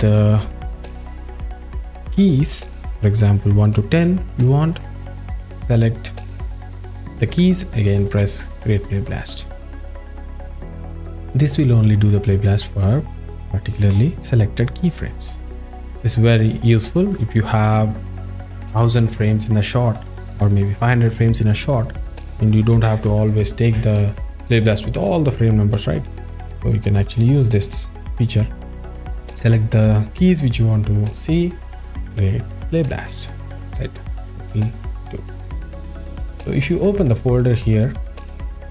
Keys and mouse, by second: 1.3 a, 1.9 click, 2.6 click, 8.8-9.9 drag, 27.2 click, 28.0 click, 28.8 click, 29.2 click, 32.1-33.7 drag, 37.9 drag.